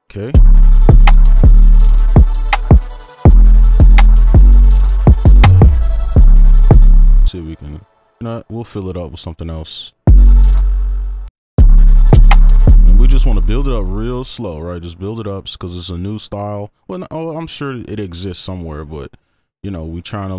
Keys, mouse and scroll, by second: 0.5 space, 0.7 right click, 5.1 right click, 8.6 space, 10.0 space, 10.6 space, 11.3 double click, 12.7 space.